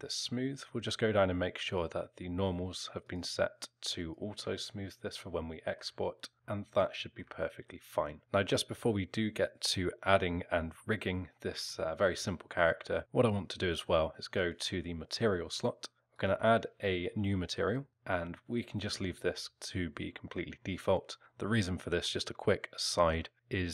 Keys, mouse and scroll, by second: 1.7 click, 3.0 click, 4.0 click, 4.6 alt+middle click, 6.3 alt+scroll down 1, 6.8 alt+middle click, 8.0 alt+middle click, 11.7 alt+middle click, 14.3 click, 16.1 click, 17.6 click, 19.1 alt+middle click.